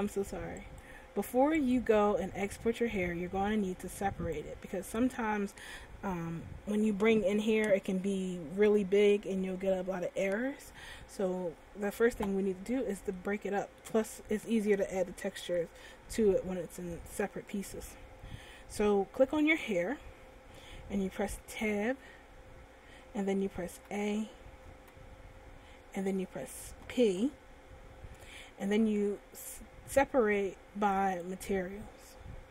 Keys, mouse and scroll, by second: 0.7 click, 1.7 click, 2.6 middle click, 4.4 right click, 13.4 middle click, 19.8 right click, 22.5 Tab, 24.3 a, 25.4 a, 27.3 p.